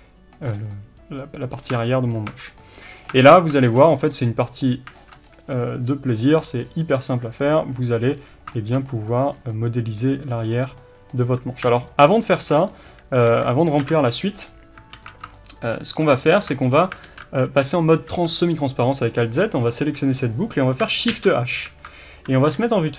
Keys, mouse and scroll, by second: 0.5 scroll down 1, 1.6-2.3 scroll up 2, 1.7 Tab, 2.3 Tab, 2.5 scroll down 1, 3.1 Tab, 3.4 scroll up 1, 3.9 scroll down 1, 5.2 scroll up 1, 8.2-8.5 scroll up 2, 10.6 scroll down 2, 11.9 alt+shift+click, 12.3-22.9 shift+middle drag, 13.3 KP_1, 14.4-14.9 scroll down 1, 14.9 alt+a, 16.2-16.6 scroll up 1, 17.1 alt+z, 19.7 b, 21.1 shift+h, 22.5 ctrl+KP_1.